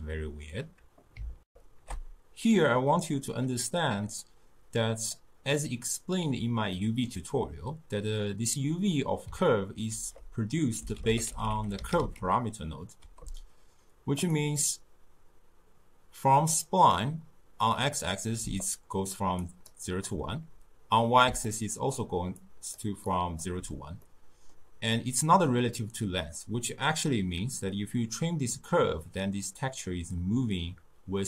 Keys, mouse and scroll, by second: 1.5 ctrl+alt+shift+w, 3.3 ctrl+alt+shift+q, 4.2-5.6 drag, 5.6-9.9 middle drag, 9.9 ctrl+a, 18.4-23.5 typing, 18.6-19.1 drag, 19.4 click, 19.9 click, 21.5-22.0 drag, 22.4 click, 23.1 click, 24.0 scroll down 2, 24.1 middle click, 24.7-27.6 scroll down 2, 27.8-30.8 drag.